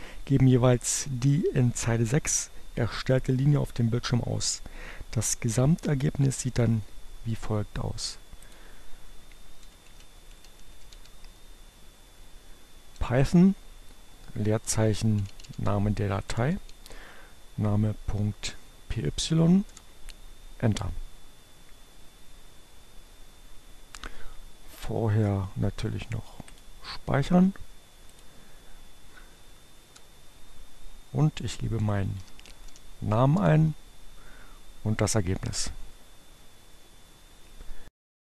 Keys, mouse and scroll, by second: 7.7 click, 9.4-10.8 typing, 12.4 space, 14.6-16.6 typing, 17.8 Return, 26.1 click, 27.8 click, 28.7 Up, 29.7 Return, 30.4 shift+p, 31.7-32.6 typing, 33.0 Return.